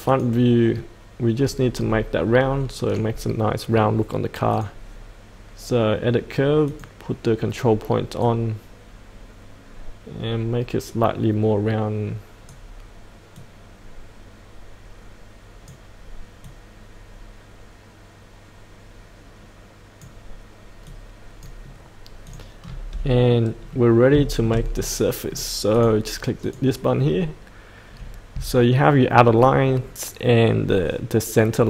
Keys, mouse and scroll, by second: 0.0 click, 4.5-16.4 drag, 20.7 click, 22.6-23.2 scroll up 1, 23.2 middle click, 24.2 shift+middle click, 25.7 click.